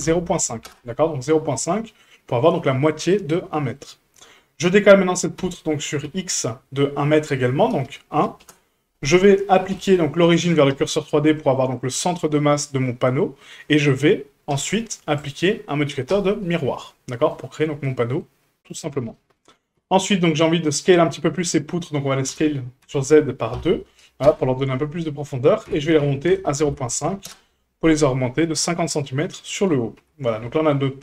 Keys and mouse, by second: 1.5 Tab, 3.3-3.8 shift+middle drag, 5.4 g, 9.7 q, 11.1 middle drag, 15.2-16.1 drag, 17.0-17.3 middle drag, 17.9 middle drag, 19.1 middle drag, 19.8 Tab, 20.5 middle click, 21.3 middle click, 22.3 s, 25.6 g, 29.0 middle click, 30.0 Tab, 30.4 shift+middle drag.